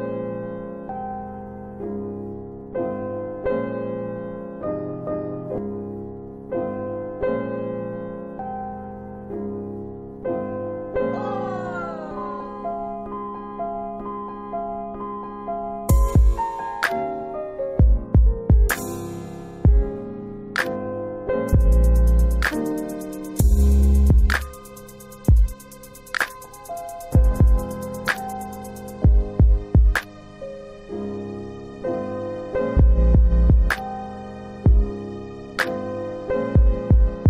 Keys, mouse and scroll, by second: 3.3 middle click, 4.6-5.1 scroll down 2, 7.7-8.9 scroll up 2, 9.3 scroll up 1, 9.5 click, 13.0 scroll down 1, 14.2 middle click, 14.9-15.9 scroll up 1, 19.3 click, 20.4 scroll down 2, 22.1 ctrl+BackSpace, 22.1 ctrl+click, 22.6 middle click, 23.3 middle click, 23.9-24.5 scroll up 1, 24.5 middle click, 26.8 alt+c, 29.7 click, 33.3 middle click, 34.2 middle click, 34.9 middle click, 35.2-36.1 scroll up 1.